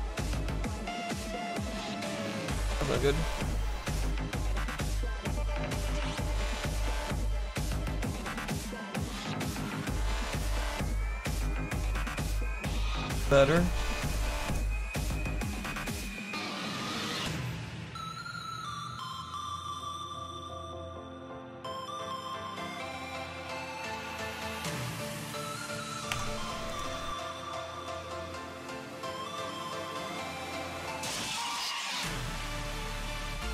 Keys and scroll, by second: 1.1 ctrl+z, 1.8 ctrl+z, 4.4 ctrl+z, 26.1 c.